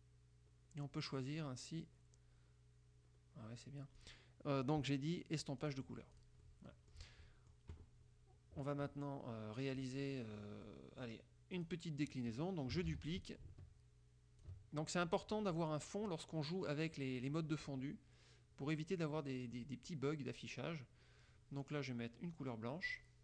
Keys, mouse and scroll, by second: 0.4 scroll down 2, 0.9-2.1 scroll down 6, 2.4 scroll down 2, 3.3 scroll up 2, 3.5-3.8 scroll down 2, 4.1 click, 5.7 click, 6.3 click, 7.3 click, 10.7-11.3 drag, 11.7 click, 13.1 ctrl+d, 13.4-14.8 ctrl+drag, 19.2 click, 23.0 click.